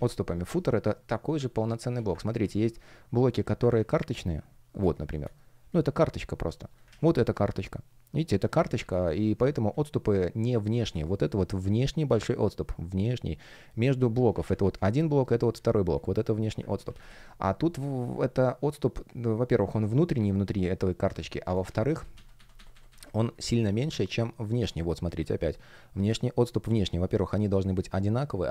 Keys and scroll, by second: 0.4 shift+p, 3.6 super+z, 4.7 space, 5.2 shift+p, 6.8 super+z, 8.7 super+z, 10.8 space, 14.3 super+z, 16.7 super+z, 21.3 super+z, 23.1 space, 25.3 shift+p.